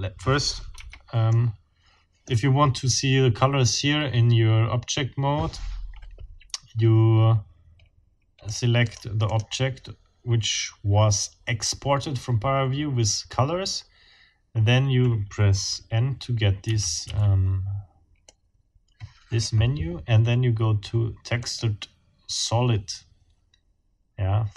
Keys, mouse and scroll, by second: 0.7 Escape, 1.3 click, 1.9-2.4 scroll up 1, 8.5-9.6 scroll up 3, 16.6 n, 18.2-19.6 drag, 21.4 click.